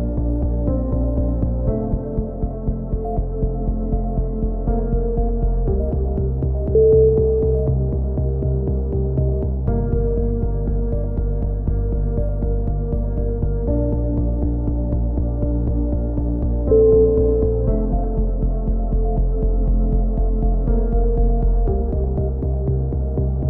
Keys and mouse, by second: 1.0-2.8 middle drag, 2.8 KP_7, 3.1 z, 3.8 click, 4.2 a, 4.7 c, 5.7-6.3 drag, 9.5 z, 9.8 a, 10.1 ctrl+KP_1, 10.6 z, 11.0 click, 11.3 b, 13.9 g, 15.8 c, 16.7 g, 17.2 z, 18.7 a, 18.9 middle click, 19.0 Tab, 20.2 Tab, 20.7 z, 21.4 ctrl+z, 21.5-22.6 drag, 23.0 a, 23.2 Tab.